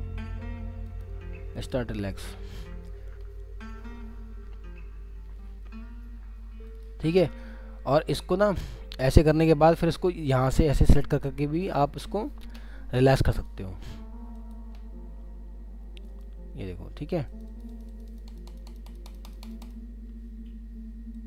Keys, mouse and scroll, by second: 7.8 scroll down 1, 8.9 middle click, 17.3 double click, 20.0 scroll up 1.